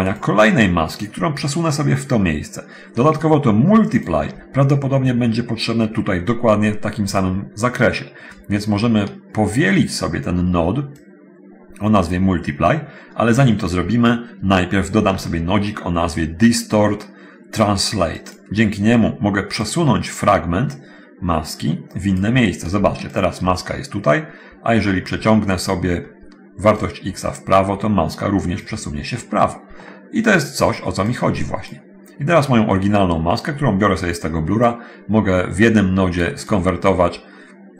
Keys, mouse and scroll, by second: 0.3 click, 4.2 ctrl+shift+click, 7.4-9.5 drag, 10.9-14.3 drag, 15.2 shift+a, 19.9 click, 20.9-22.6 drag, 23.1 ctrl+shift+click, 25.1-25.6 scroll up 1, 25.7 click, 27.1-28.9 drag, 31.3 click, 33.4-34.9 drag, 35.9 click, 37.1 middle click.